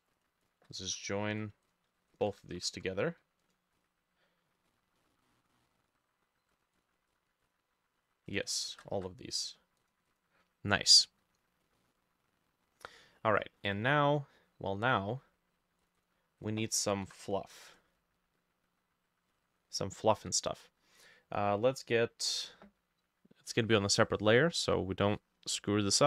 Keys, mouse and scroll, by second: 0.5 shift+click, 0.9 ctrl+r, 2.2 shift+click, 2.6 ctrl+e, 3.8 double click, 4.7 scroll down 2, 5.0 middle click, 6.8 double click, 7.1 double click, 7.5 double click, 8.6 shift+click, 8.9 ctrl+e, 10.1 double click, 11.7 scroll up 1, 11.8 middle click, 13.0 middle click, 13.3-14.2 scroll up 3, 13.6 middle click, 14.2 middle click, 16.0 double click, 16.5 double click, 17.1 Insert, 20.2 b.